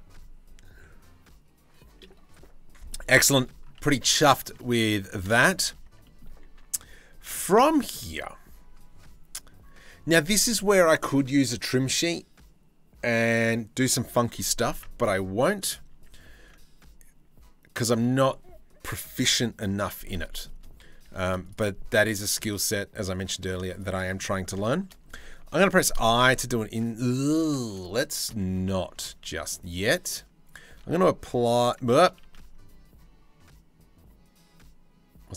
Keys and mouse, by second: 2.5-2.8 middle drag, 3.6 shift+middle drag, 4.7 Tab, 5.3 Tab, 5.5 Tab, 5.7 click, 6.9 click, 14.4 Tab, 15.5 Tab, 20.0 middle click, 20.6 3, 20.8 click, 22.0 shift+click, 23.4 shift+click, 23.7 shift+middle click, 25.2 i, 28.3 ctrl+z, 28.8 Tab, 30.1 click, 30.6 ctrl+a, 32.1 ctrl+z.